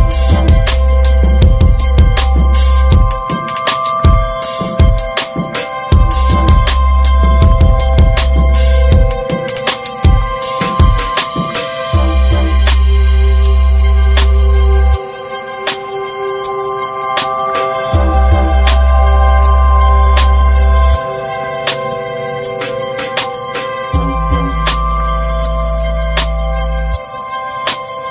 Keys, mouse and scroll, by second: 0.1 scroll up 3, 0.4-1.1 shift+middle drag, 1.1 Tab, 1.8 3, 1.8 click, 2.3 alt+middle click, 2.7 scroll up 3, 3.0 shift+middle click, 4.0 ctrl+b, 6.0 middle click, 6.3 Tab, 6.5 click, 6.8 ctrl+a, 7.2 Tab, 7.5 shift+middle click, 7.9 ctrl+b, 12.5 shift+middle click, 13.2 click, 14.1 ctrl+b, 15.2 Tab, 15.4 click, 15.5 scroll down 4, 15.7 middle click, 16.1 click, 16.3 ctrl+a, 16.8 click, 17.1 alt+middle click, 17.3 alt+middle click, 17.6 Tab, 17.8-18.4 scroll up 1, 18.4 shift+middle click, 19.1 click, 20.6 2, 21.1 click, 22.2 alt+shift+click, 22.4-23.2 scroll up 2, 23.2 ctrl+b, 25.5 middle click, 26.3 3, 26.5 right click, 27.1 right click, 27.6 middle click.